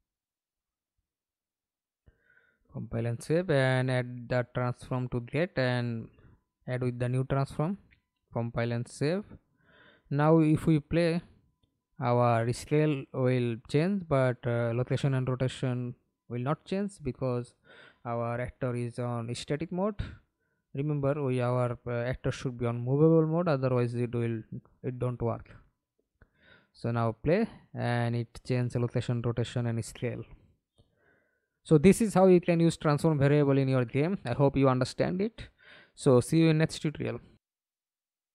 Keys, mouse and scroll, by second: 1.4 double click, 8.0 double click, 9.1 middle click, 9.7 F11, 10.3 alt+p, 12.2 w, 12.5 a, 15.9-16.5 a, 17.6 Escape, 18.0 middle click, 19.1 F11, 23.3 middle click, 24.1 F11, 24.7 alt+p, 26.0 a, 26.4-26.9 w, 28.8-37.0 typing, 38.1 alt+F9.